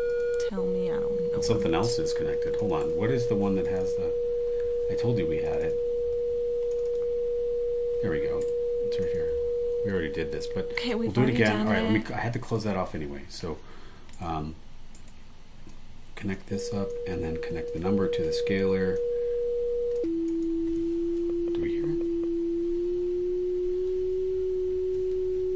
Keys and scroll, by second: 0.5 BackSpace, 2.8 super+e, 6.1 super+w, 8.4 super+e, 9.7 BackSpace, 11.0 BackSpace, 14.1 super+e.